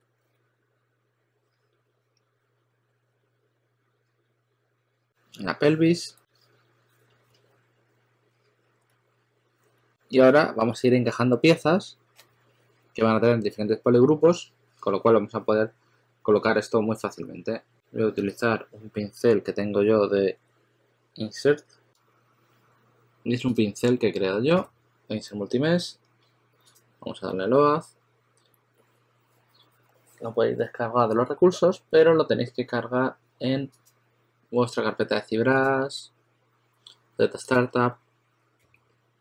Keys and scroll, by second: 8.8 s, 18.1 b, 24.4 b, 38.5 b.